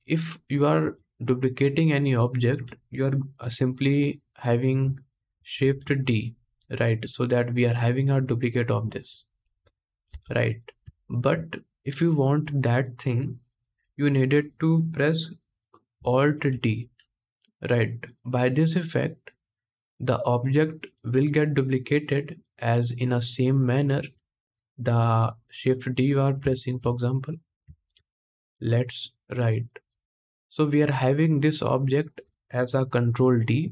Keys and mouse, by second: 5.3 shift+d, 5.7-7.0 middle drag, 7.0-11.5 drag, 9.8 x, 11.5-18.0 middle drag, 16.2 alt+d, 18.0-24.9 drag, 24.9-28.7 middle drag, 27.6 shift+d, 28.7-30.9 drag, 30.9-33.7 middle drag.